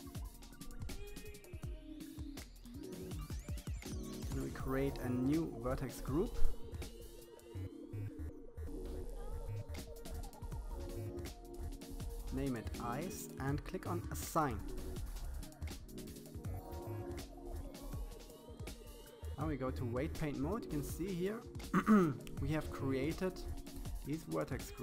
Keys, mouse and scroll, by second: 0.1-1.2 scroll up 3, 1.3-2.9 drag, 3.3 click, 5.8 click, 6.1 click, 8.2-9.6 drag, 11.7-12.9 drag, 14.1-15.6 drag, 19.3-20.9 middle drag, 21.5-24.6 middle drag.